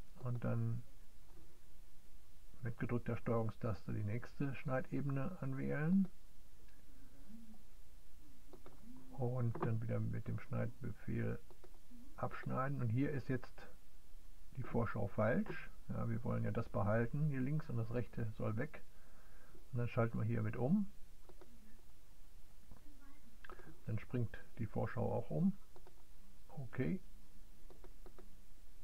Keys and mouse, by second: 0.3-6.2 drag, 8.6-19.5 drag, 19.6-21.7 drag, 22.2 click, 23.1 click.